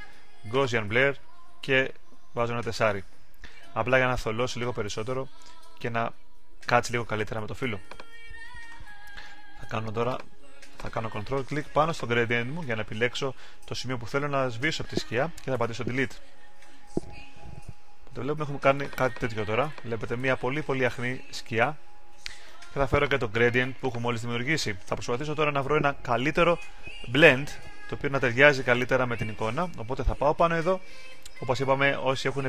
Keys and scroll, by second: 17.5 super+d.